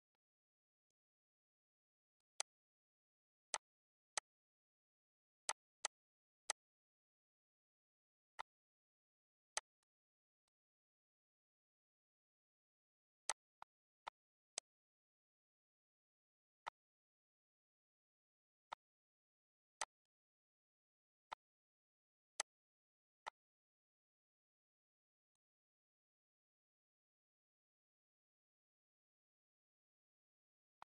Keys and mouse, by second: 0.7 click, 1.9 click, 2.7 Delete, 3.3 click, 3.9 click, 5.2 click, 6.2 click, 8.1 shift+click, 9.3 click, 10.2 click, 13.1 click, 14.3 click, 16.4 click, 18.5 click, 19.5 click, 22.1 click, 23.0 click, 25.1 click, 30.5 click.